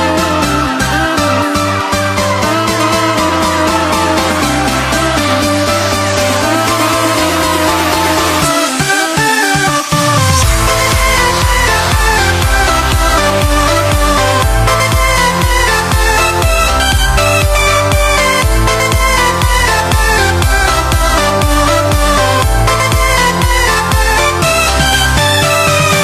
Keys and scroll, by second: 5.4 BackSpace.